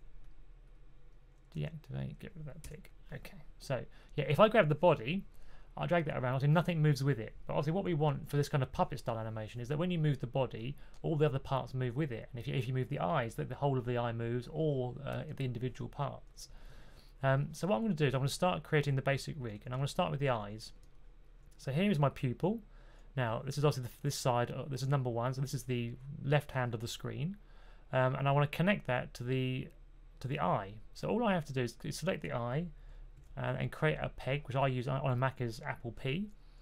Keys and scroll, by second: 1.5 typing, 2.5 typing, 8.0 super+z, 19.3-20.3 typing, 33.1 super+p.